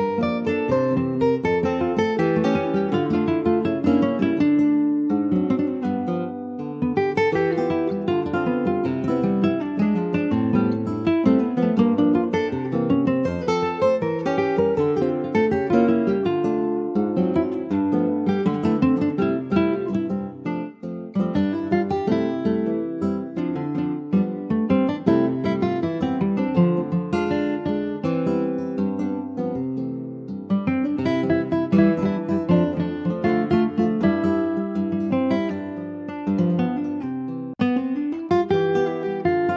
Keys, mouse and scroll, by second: 0.7 scroll down 1, 1.0 shift+middle click, 1.7 scroll up 1, 1.8 Tab, 2.2 scroll up 1, 2.5 click, 2.9 Tab, 3.3 click, 4.6 alt+shift+click, 5.1-7.3 middle drag, 7.3 s, 13.9-15.6 middle drag, 15.6 ctrl+s, 15.7 click, 16.2 alt+middle click, 17.1 click, 18.4 Tab, 18.8-19.4 scroll down 2, 19.4 alt+z, 19.9 shift+middle click, 20.9 Tab, 21.4 Tab, 22.2 click, 22.9 alt+z, 23.3 middle click, 24.1-24.8 scroll up 4, 25.3 click, 26.5 scroll down 1, 26.8 middle click, 27.6 Tab, 27.8 click, 28.1 scroll down 4, 28.3 middle click, 28.8 ctrl+s, 28.9 click, 29.2-30.4 middle drag, 30.4 ctrl+s, 30.6 click, 30.9 Tab, 31.1 scroll up 2, 31.4 shift+middle click, 32.1 Tab, 32.5 Tab, 32.8 scroll up 1, 33.1-35.0 middle drag, 35.0 Tab, 35.4 click, 35.8 Tab, 36.2 middle click, 36.7 ctrl+s, 37.3 click, 38.2 2, 38.6 click.